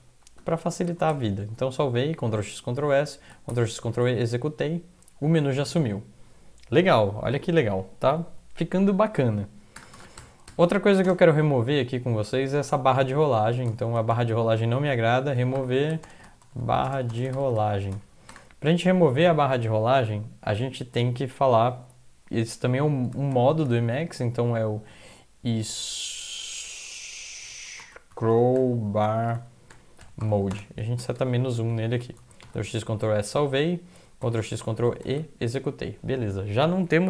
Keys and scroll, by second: 0.0-0.9 typing, 1.1 ctrl+s, 3.5 ctrl+x, 3.7-4.4 typing, 9.8 Return, 9.9 Return, 10.2-11.6 typing, 13.7-18.4 typing, 23.3 typing, 24.0 Left, 24.6-25.7 typing, 27.2-34.2 typing, 34.4 ctrl+x, 35.0 ctrl+e.